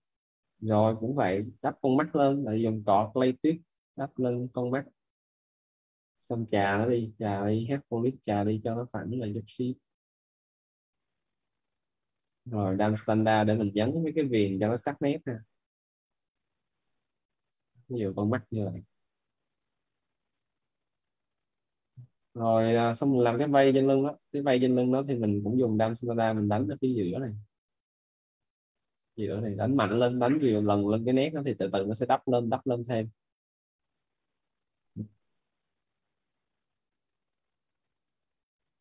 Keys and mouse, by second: 0.9-2.1 typing, 3.1 click, 6.2-7.6 typing, 8.0 click, 10.6 right click, 11.3-12.5 typing, 12.4 right click, 13.0 right click, 13.5 click, 17.5 right click, 17.9 z, 18.2 right click, 18.7 click, 21.1 right click, 22.0 right click, 22.4 right click, 22.8 right click, 23.2 right click, 25.9 alt+click, 31.8 alt+right click, 32.5 alt+click, 34.5 right click, 34.9 alt+right click, 35.9 alt+right click, 37.8 alt+click.